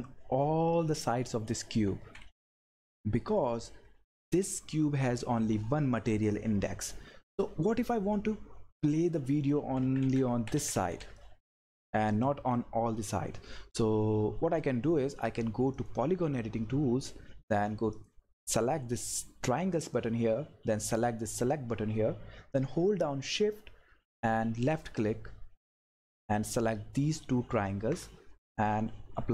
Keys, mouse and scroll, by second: 1.6 click, 1.6 Left, 4.1 click, 8.8 click, 9.6 Left, 10.3 Up, 10.8 Left, 15.8 click, 17.9 click, 21.3 click, 24.0 shift+Num_Lock, 24.0 click.